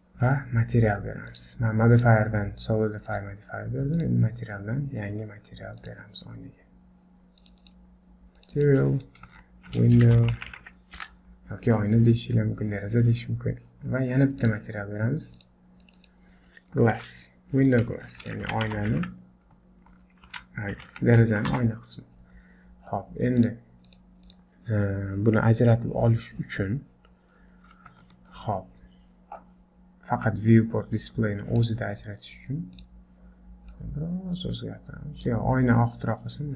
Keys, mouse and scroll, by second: 1.3 click, 2.0 click, 3.1 click, 4.0 click, 5.8 click, 7.6 click, 8.4 click, 8.5 click, 14.4 click, 15.4 click, 18.0 BackSpace, 22.4-22.9 scroll down 2, 22.9-23.9 scroll up 4, 23.4 click, 23.9 click, 24.3 click, 24.8-25.5 scroll down 1, 25.5-26.1 scroll down 2, 26.1 scroll up 3, 26.7 scroll down 1, 27.4-27.9 scroll up 3, 28.0 shift+middle click, 28.8-30.7 scroll down 9, 31.6 click, 31.9-32.3 scroll down 3, 32.8 click.